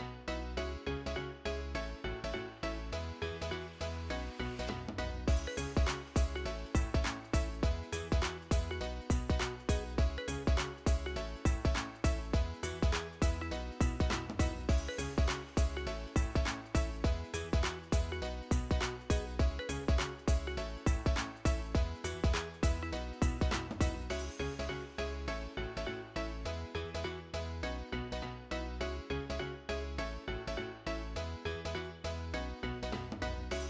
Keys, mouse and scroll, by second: 9.4 middle click, 10.9-12.8 typing, 15.6 middle click, 17.5 ctrl+a, 32.1 middle click.